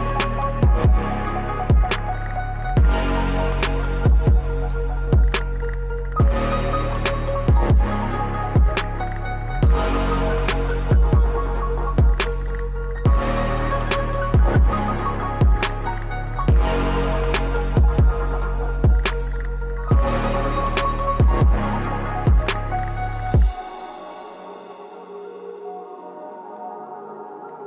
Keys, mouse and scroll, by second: 12.0 right click, 12.7 typing, 15.0-15.8 typing, 15.2 click, 16.5 scroll up 1, 17.7 click, 19.0 Delete, 19.7 scroll down 1, 22.3 click, 23.2 Delete, 23.7 click, 26.3 right click.